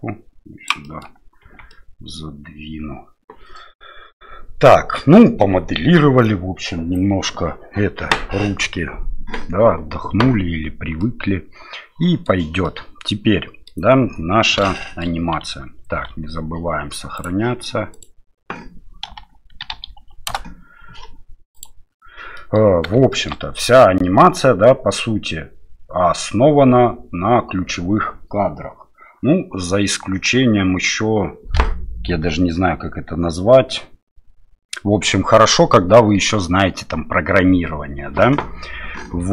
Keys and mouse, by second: 1.0 middle click, 1.4 Tab, 1.7-5.0 middle drag, 11.0-12.3 middle drag, 12.6-13.7 middle drag, 14.8 shift+middle click, 15.9 ctrl+s, 22.4 middle click, 23.1 shift+middle click, 39.0 KP_7.